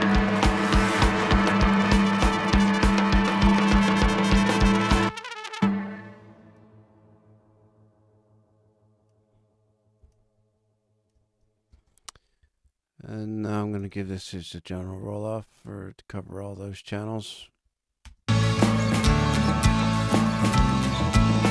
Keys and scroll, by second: 11.7 super+space, 12.2 space, 18.0 space.